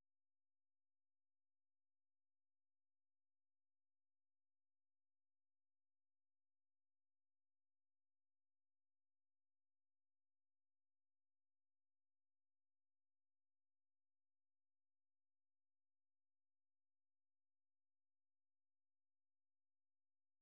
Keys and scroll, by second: 1.4 typing, 11.7 typing.